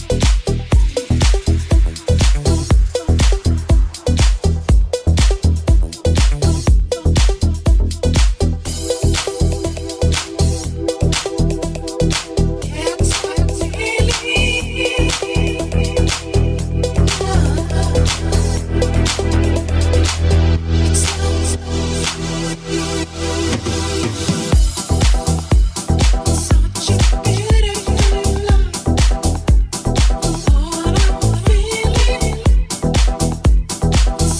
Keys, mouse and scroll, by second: 0.1 shift+right click, 0.6 shift+right click, 1.7 g, 3.8 right click, 4.3 shift+right click, 6.6 g, 8.4 s, 11.4 right click, 11.5-15.4 middle drag, 13.4-20.7 drag, 16.3 alt+middle click, 16.3 alt+right click, 17.0 alt+shift+middle click, 17.0 alt+shift+right click, 17.8 shift+middle click, 17.8 shift+right click, 18.2 shift+middle click, 18.2 shift+right click, 20.7-34.3 middle drag, 22.7 ctrl+r.